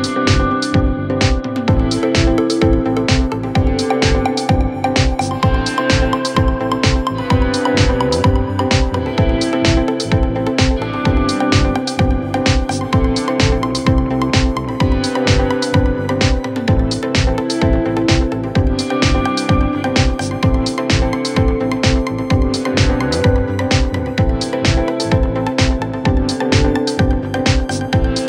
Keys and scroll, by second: 0.4 4, 2.1 2, 4.2 4, 5.2 ], 6.8 4, 8.8 3, 10.4 4, 18.6 3.